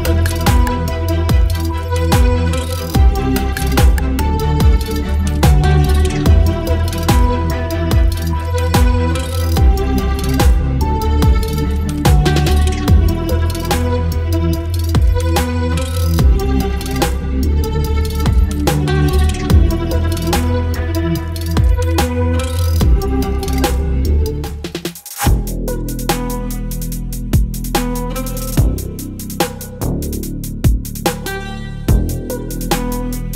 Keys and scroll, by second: 0.2 v, 1.1 space, 2.4 Delete, 2.9 space, 3.6 ctrl+BackSpace, 3.8 space, 5.2 v, 6.6 Delete, 9.1 space, 10.5 space, 11.0 space, 12.2 ctrl+BackSpace, 13.4 ctrl+BackSpace, 14.3 ctrl+BackSpace, 15.5 ctrl+BackSpace, 16.7 ctrl+BackSpace, 16.8 space, 18.5 ctrl+BackSpace, 18.7 space, 19.9 ctrl+BackSpace, 20.1 space, 21.2 ctrl+BackSpace, 22.5 ctrl+BackSpace, 22.6 space, 24.0 ctrl+BackSpace, 25.3 ctrl+BackSpace, 26.5 ctrl+BackSpace, 27.0 space, 28.1 space, 29.4 ctrl+BackSpace, 29.5 space, 30.7 ctrl+BackSpace, 30.8 space, 32.2 space, 32.5 v.